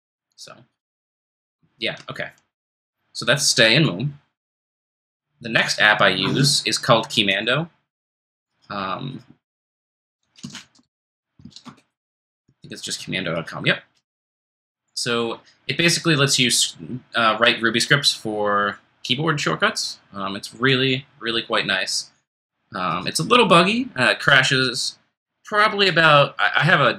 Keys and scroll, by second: 9.7-11.9 typing.